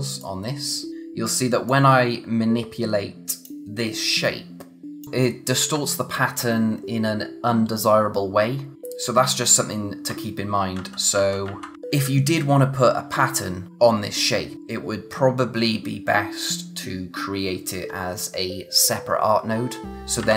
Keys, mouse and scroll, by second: 4.1 click, 10.8 ctrl+z, 19.9 click, 20.2 ctrl+z.